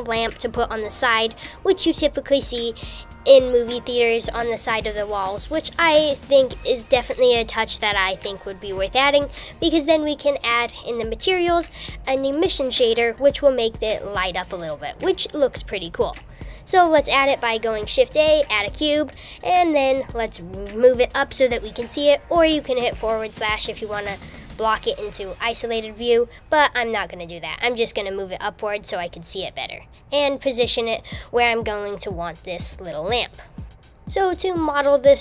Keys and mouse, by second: 4.5-5.7 middle drag, 13.7 shift+a, 20.5 KP_1, 22.0 g, 26.5 KP_1, 27.2 KP_2, 27.4 KP_3, 29.5 g, 34.2 h, 34.3 super+z, 34.6 g.